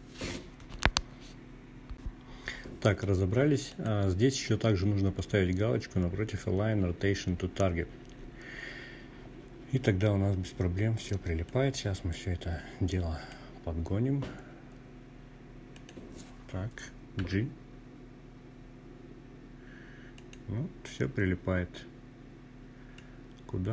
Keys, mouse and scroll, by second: 1.7-6.5 drag, 9.4-11.3 drag, 13.7 click, 15.2 g, 18.1 click, 20.9-22.7 drag.